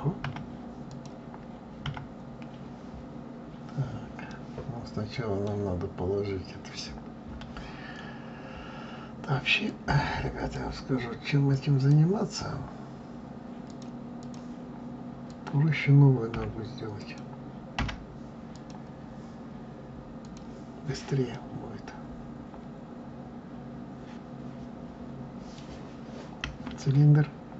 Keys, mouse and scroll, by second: 0.1 KP_7, 0.8 click, 1.8 KP_7, 2.7-3.1 scroll down 2, 3.7-4.2 scroll up 1, 4.2-7.3 middle drag, 9.6 click, 10.5 click, 11.5 click, 13.6-15.3 drag, 16.3 End, 16.9 click, 17.7 Delete, 18.5 click, 20.2 click, 21.3-24.3 middle drag.